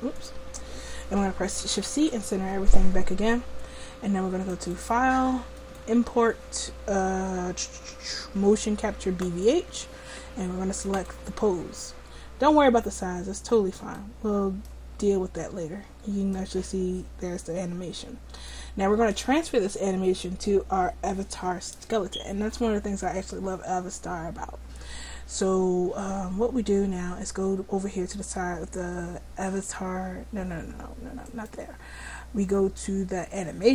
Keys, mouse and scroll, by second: 1.9 shift+c, 4.5 click, 11.1-12.7 drag, 12.7-14.1 middle drag, 16.4-18.0 scroll up 1, 18.0 click, 29.4-33.0 drag.